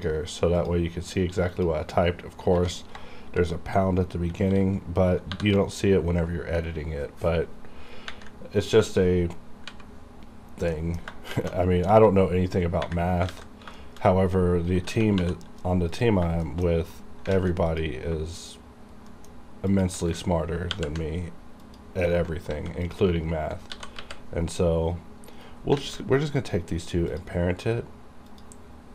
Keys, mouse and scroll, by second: 0.6 click, 2.6 Home, 5.4 shift+#, 9.7 n, 10.8 middle click, 13.3 alt+a, 13.8 shift+middle click, 14.8-15.2 typing, 16.0 click, 16.5 shift+middle click, 16.8-17.3 scroll up 1, 17.4 alt+a, 17.8 click, 18.4 shift+click, 19.1 shift+middle click, 19.7 shift+click, 20.7 ctrl+p, 21.6 click, 22.5 alt+a, 22.8 click, 23.5 scroll down 1, 23.7 g, 25.4 right click, 25.8 alt+a, 27.1 click.